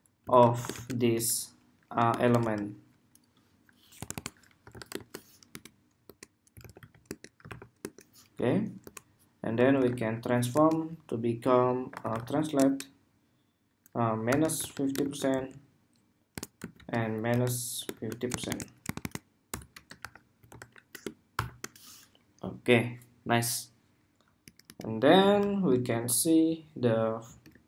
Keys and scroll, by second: 25.0 super+s, 25.6 super+Tab, 27.3 super+Tab.